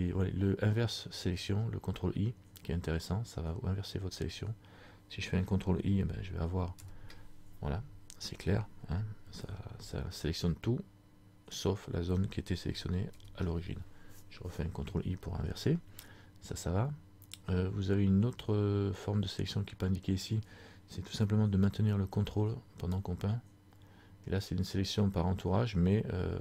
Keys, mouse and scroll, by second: 6.9 ctrl+i, 10.4 middle click, 13.3 ctrl+i, 23.0 ctrl+click.